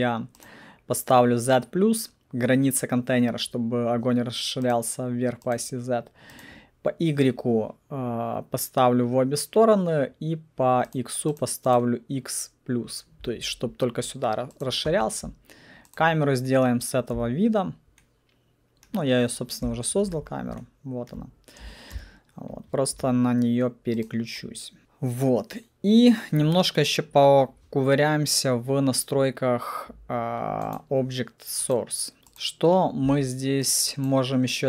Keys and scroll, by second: 17.1 c, 19.7 p, 21.9 c.